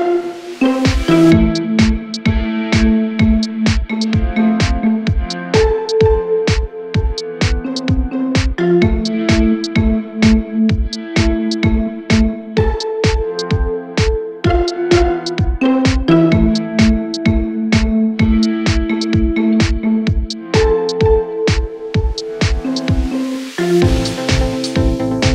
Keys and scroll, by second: 13.8 Escape, 14.4 Delete, 15.2 F3.